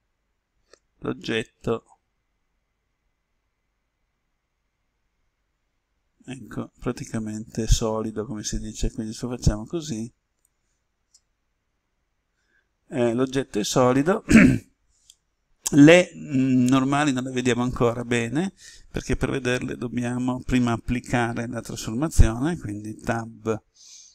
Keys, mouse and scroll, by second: 15.0-18.8 middle drag, 23.1 Tab.